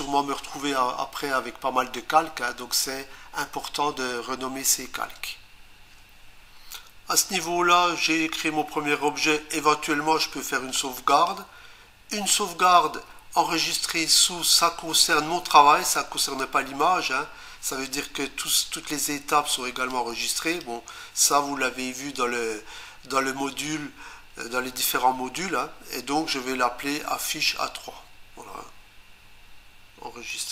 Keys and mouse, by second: 11.1 click, 19.9 click, 30.3 click.